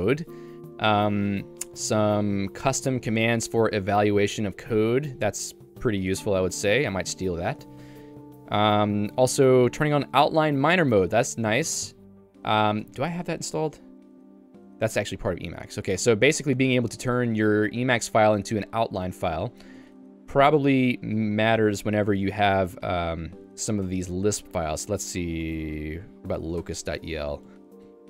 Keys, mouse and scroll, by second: 0.8 j, 1.7-2.8 l, 3.7 l, 4.3 l, 6.5-10.3 typing, 14.7 Return, 16.1 q, 17.0 h, 26.8 Return, 27.5 ctrl+d, 27.9 ctrl+d.